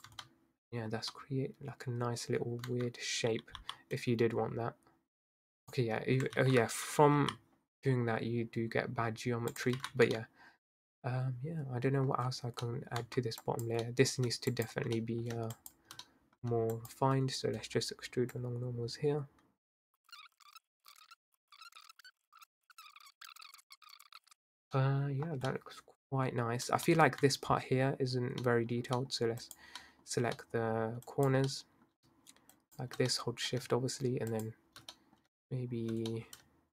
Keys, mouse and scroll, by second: 0.1 Tab, 0.3-2.0 middle drag, 2.0-2.7 scroll down 1, 2.7 Tab, 3.6 i, 6.4 ctrl+z, 7.2 i, 9.8 ctrl+z, 10.1 Tab, 10.2-11.9 middle drag, 11.9 scroll up 2, 12.2 scroll down 1, 12.3-13.0 scroll up 3, 12.6 middle drag, 13.0 Tab, 13.4 drag, 13.9-14.5 middle drag, 14.5 shift+drag, 15.0-15.6 middle drag, 15.6 shift+click, 16.1 middle click, 16.8 shift+click, 18.4 click, 20.0 middle click, 20.1 Tab, 20.3 click, 20.4 shift+click, 20.5 middle click, 20.6 middle click, 21.1 click, 21.3 Tab, 21.3 middle click, 21.4 scroll up 2, 21.5 middle click, 21.6 shift+click, 21.9 middle click, 21.9 scroll down 2, 22.2 middle click, 22.5 click, 22.6 Tab, 22.6 middle click, 22.7 scroll down 1, 22.7 middle click, 22.8 scroll up 2, 22.8 scroll down 2, 22.9 middle click, 22.9 scroll up 1, 23.0 middle click, 23.0 Tab, 23.2 middle click, 23.4 shift+click, 23.5 middle click, 23.5 scroll up 1, 23.6 middle click, 23.9 click, 24.2 middle click, 24.5 scroll down 1, 24.8-25.3 middle drag, 25.3 scroll down 1, 25.5-27.2 middle drag, 27.2-27.5 scroll down 1, 27.5 Tab, 28.4 middle click, 28.7 scroll up 1, 29.0 middle click, 29.4 click, 29.8-31.1 middle drag, 31.1 click, 31.5-32.5 middle drag, 32.5 shift+click, 33.1-34.3 middle drag, 34.3 shift+click, 34.9-36.7 middle drag.